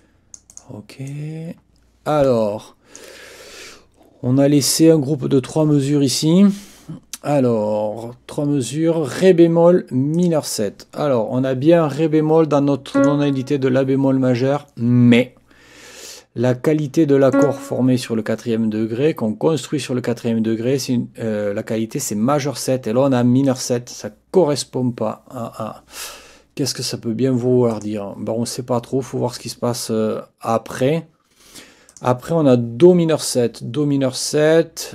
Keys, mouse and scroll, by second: 0.0 click, 1.1-3.2 drag, 10.1 click, 12.9 click, 17.3 click, 23.4 click, 27.7 click, 31.9 click.